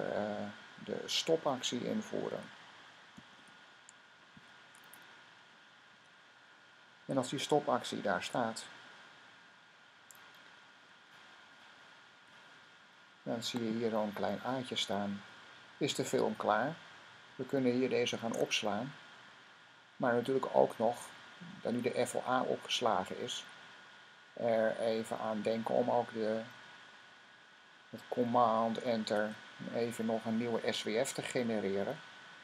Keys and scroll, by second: 1.9-4.2 typing, 5.8 shift+;, 18.1 s.